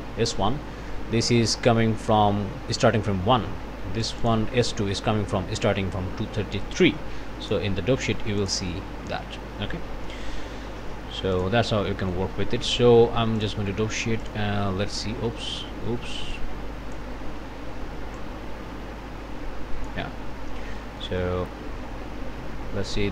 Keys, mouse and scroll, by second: 0.1 scroll up 1, 4.0 click, 7.4 click, 8.4 click, 11.3 click, 11.9 ctrl+click, 12.6 ctrl+s, 13.4 click, 14.2 click, 15.3 ctrl+z, 16.3 click, 18.2-20.1 drag, 20.2-20.9 scroll down 2, 21.0 click, 22.4-23.1 scroll down 1.